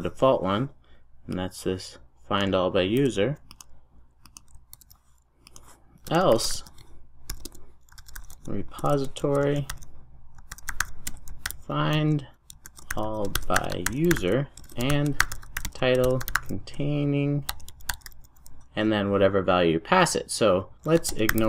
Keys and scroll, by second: 3.0 super+x, 5.7 super+v.